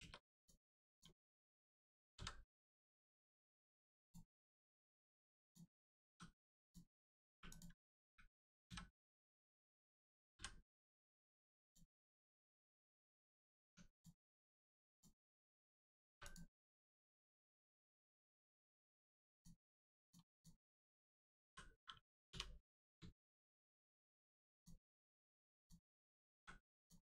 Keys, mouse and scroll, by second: 0.0 Return, 0.3 click, 2.1 v, 3.0-4.0 scroll down 1, 4.0 click, 6.6 click, 10.3 m, 11.6 click, 12.9 Tab, 13.1 click, 13.6 Tab, 13.9 click, 14.5-14.9 scroll up 1, 14.9 click, 15.2 scroll down 1, 16.2 click, 18.3 right click, 19.3 click, 22.3 u, 23.2 shift+middle click, 24.5 click, 25.1 scroll down 1, 26.3 a, 26.7 click.